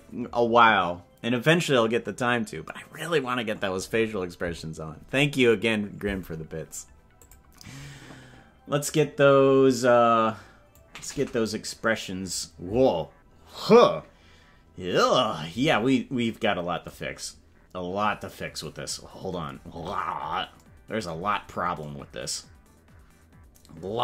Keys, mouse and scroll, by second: 9.0 click, 10.7-12.4 drag, 19.9 scroll up 2, 20.7 scroll up 2, 21.5 scroll down 2.